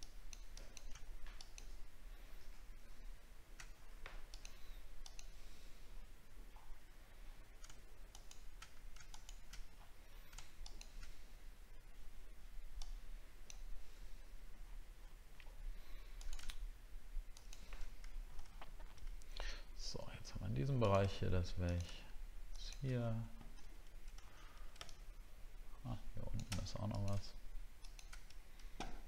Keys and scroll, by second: 18.5 alt+scroll down 1, 19.3 alt+scroll up 1, 24.2 alt+scroll up 1.